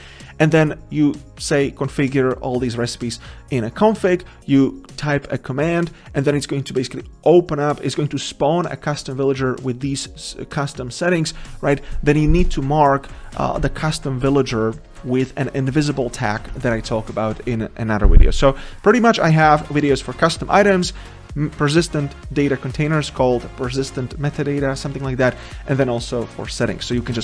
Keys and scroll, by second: 12.5 Tab, 13.5 ctrl+z.